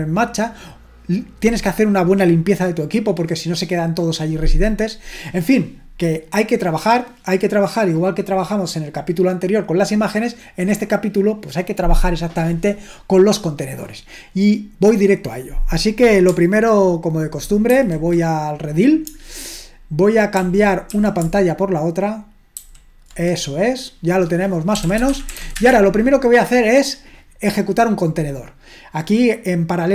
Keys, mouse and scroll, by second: 17.7 ctrl+1, 20.3 super+l, 20.9 super+l, 22.7 shift+super+h, 24.5-26.0 typing.